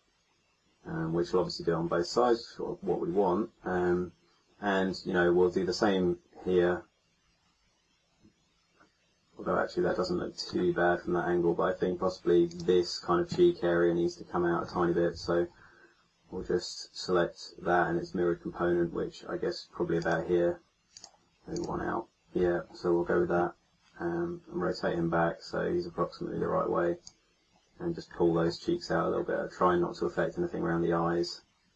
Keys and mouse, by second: 0.8 middle click, 13.8 click, 15.1 KP_1, 19.9-23.4 drag, 23.7 middle click, 23.9-24.9 middle drag, 25.2 middle click, 27.0-28.6 drag.